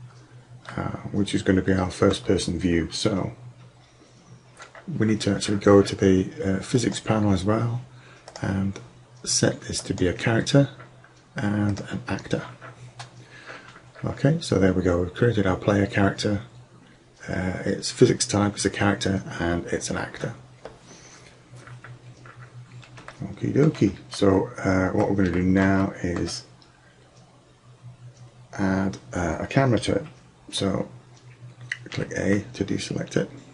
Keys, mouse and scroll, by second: 6.8-10.1 drag, 11.7 click, 26.0-27.8 drag, 32.0 a.